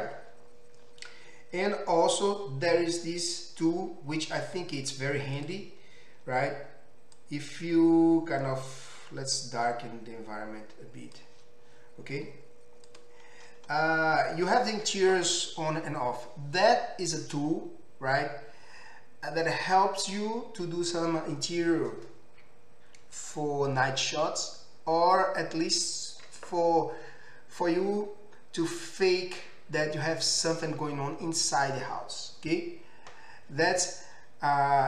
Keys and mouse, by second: 5.5-7.3 middle drag, 7.3-13.0 drag, 13.0-34.8 middle drag.